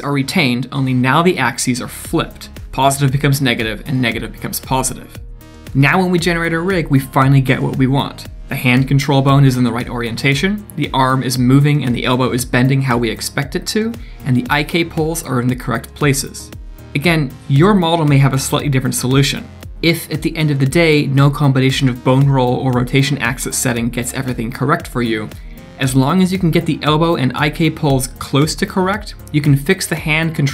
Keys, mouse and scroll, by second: 4.5 d, 4.6 right click, 4.9 d, 5.8 scroll down 1, 6.2 click, 6.9 click, 7.2 scroll down 1, 7.4 middle click, 7.8 shift+click, 8.4 click, 8.6 middle click, 8.8 Tab, 9.3 middle click, 9.8 click, 10.1 scroll up 2, 10.9 scroll down 2, 11.0 middle click, 11.4 g, 12.5 middle click, 13.2 g, 14.8 click, 15.8 click, 16.4 middle click, 19.5 click, 20.7 click, 23.2 click, 27.9 click, 28.4 click.